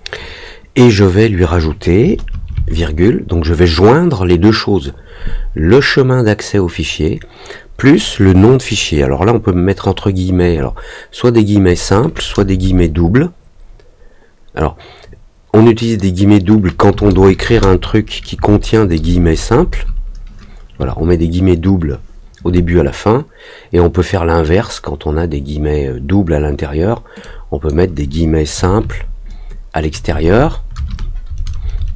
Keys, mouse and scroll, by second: 27.2 click.